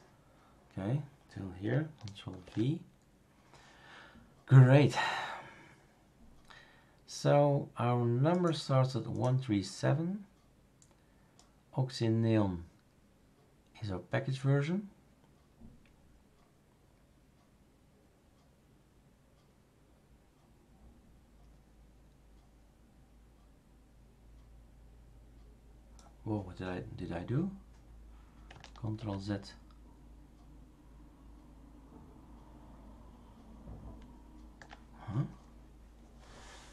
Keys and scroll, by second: 2.4 ctrl+v, 28.9 ctrl+z.